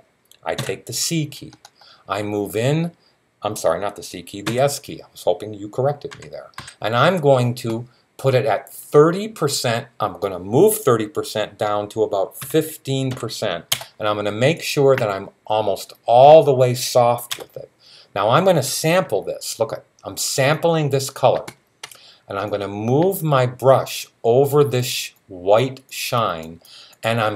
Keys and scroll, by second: 0.4 c, 4.3 s, 5.6-6.9 typing, 11.9-12.9 typing.